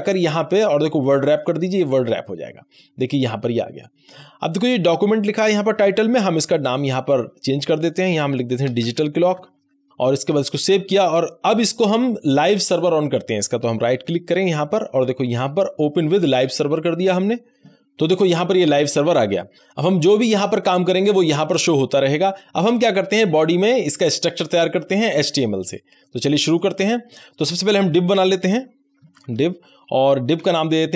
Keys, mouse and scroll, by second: 2.4 scroll down 1, 2.7 scroll up 1, 6.1-8.8 drag, 8.6-10.4 typing, 10.5 ctrl+s, 13.8 ctrl+s, 13.9 right click, 16.3 click, 19.5 click, 25.6-26.5 scroll down 1, 26.5 click, 28.9-30.9 typing.